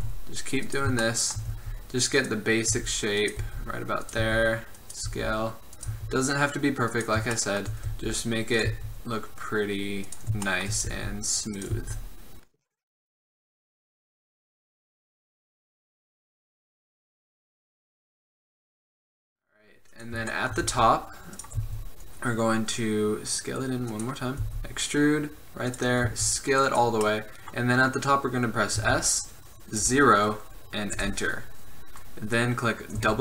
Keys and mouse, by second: 0.0 s, 1.7 e, 2.8-6.0 typing, 7.5 click, 8.1 e, 8.8 s, 11.1-17.0 typing, 13.2 click, 14.0 click, 16.8 click, 17.4 click, 18.0-19.1 typing, 20.8 e, 21.7 s, 24.6 e, 26.2 s, 27.2 middle click, 28.9 s, 33.1 w.